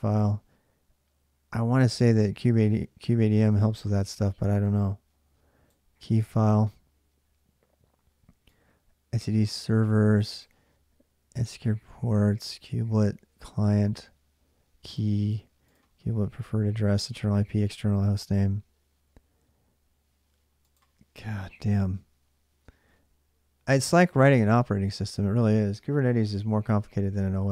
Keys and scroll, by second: 22.4 space.